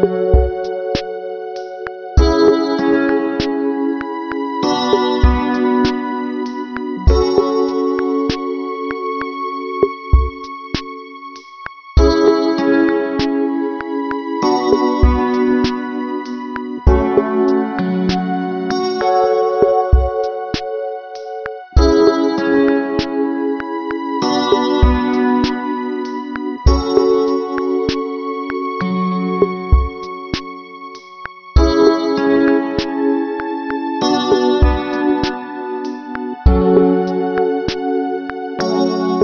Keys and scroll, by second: 2.6 ctrl+alt+shift+n, 22.5 ctrl+-, 23.5 ctrl+=, 24.7 space, 27.8 ctrl+alt+shift+n.